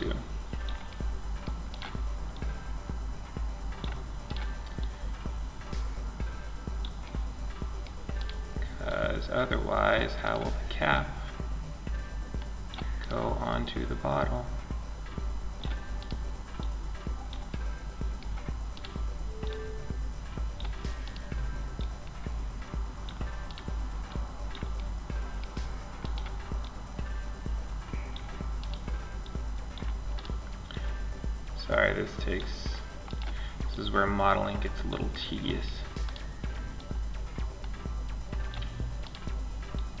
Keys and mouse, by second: 0.1-2.5 middle drag, 2.7 right click, 3.4 middle click, 3.5 right click, 5.3 right click, 7.4 right click, 9.0 click, 9.0 right click, 9.2 click, 9.9 right click, 11.9 middle click, 12.2 right click, 14.7 middle click, 15.2 right click, 16.7 middle click, 17.1-18.6 drag, 19.7 click, 20.7 click, 22.0 click, 22.8 click, 24.0 middle click, 24.9 click, 27.0 click, 27.8 click, 31.2 click, 32.3 click, 34.1 click, 34.9-37.3 right drag, 36.0 click, 36.0 middle click, 37.3 click, 38.3-40.0 right drag, 39.0-40.0 drag.